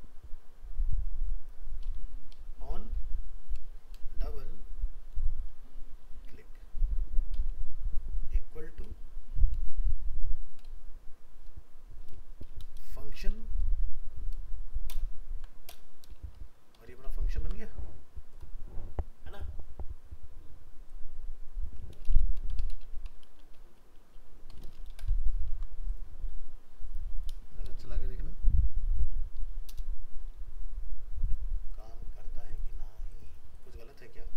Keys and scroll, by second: 15.0 BackSpace, 17.4 ctrl+s, 25.3 ctrl+s.